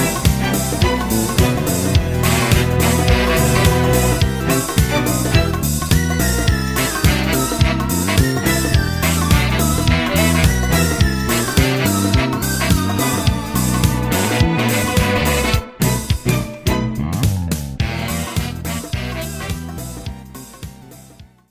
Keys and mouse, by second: 0.4 middle click, 4.2 middle click, 5.3 middle click, 6.3 middle click, 9.4 middle click, 11.2 middle click.